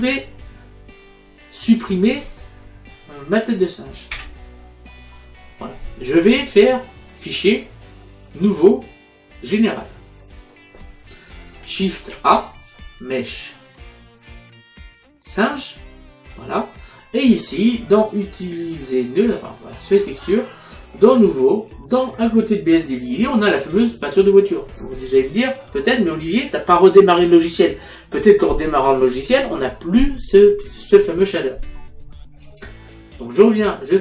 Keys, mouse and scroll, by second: 7.2 click, 8.3 click, 9.6 click, 12.1 shift+a, 15.4 click, 20.0 click, 22.2 click, 33.5 click.